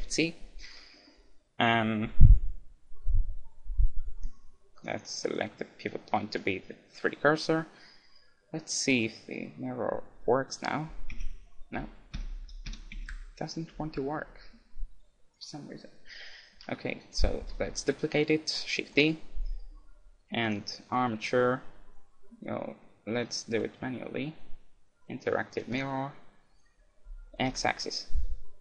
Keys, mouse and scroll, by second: 0.5-2.7 middle drag, 2.1 KP_1, 4.1-6.6 drag, 9.0-11.5 middle drag, 12.9 m, 17.4 shift+d, 19.1-20.9 right drag, 20.5-22.1 drag.